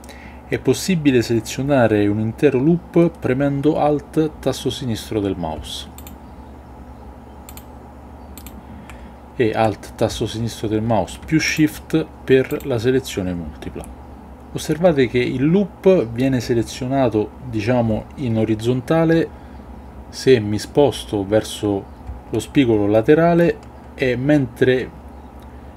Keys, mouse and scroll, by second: 5.9 alt+click, 7.4 alt+click, 8.3 alt+click, 11.4 alt+shift+click.